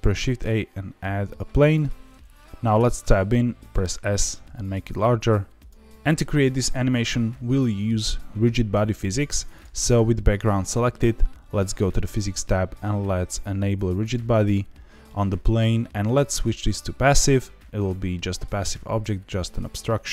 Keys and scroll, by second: 2.4 Escape, 2.4 s, 2.7 Tab, 3.6 s.